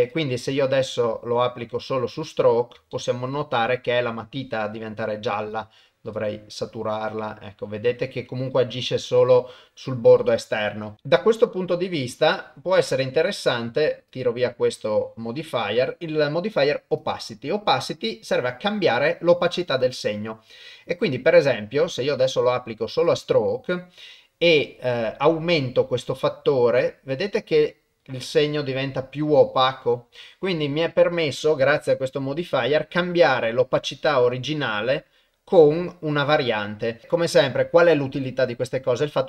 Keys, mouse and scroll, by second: 0.1-2.2 drag, 2.9 shift+middle click, 3.5 shift+middle click, 5.5 click, 6.9-10.7 drag, 13.0 click, 14.1-17.1 drag, 21.4-23.1 drag, 25.5-37.0 drag.